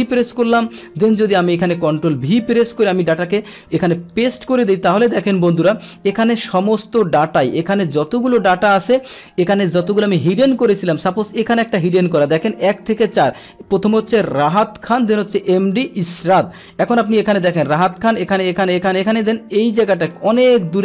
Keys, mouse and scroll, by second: 0.3 click, 1.6 click, 2.6 ctrl+v, 4.1 click, 5.3 click, 5.5 click, 6.7 click, 11.7 click, 16.1-17.2 drag, 17.8 click, 18.2 click, 18.6 click, 18.9 click, 19.6 click, 20.0 click, 20.4 click.